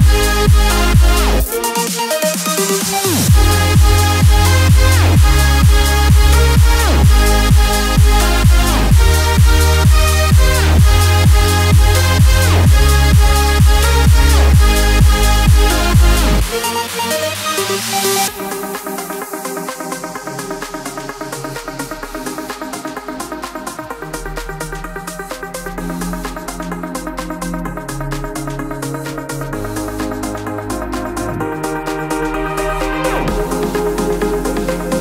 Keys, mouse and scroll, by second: 0.9 u, 1.8 click, 7.0 click, 9.1 typing, 9.4-16.6 drag, 16.6-27.5 alt+shift+drag, 27.5 Up, 30.0 u, 30.9-35.0 drag.